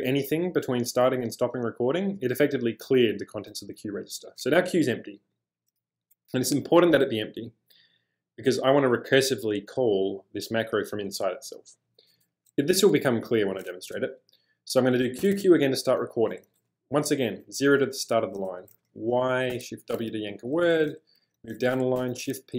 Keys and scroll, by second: 15.2 typing, 17.4 0, 19.2-20.0 typing, 21.4 j, 22.0 shift+p.